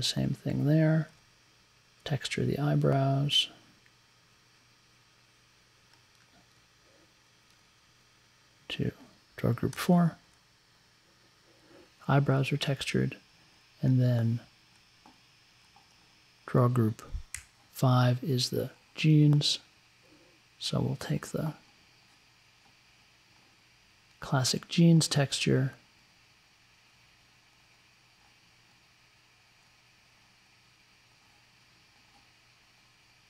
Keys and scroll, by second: 9.7 4, 17.3 Up.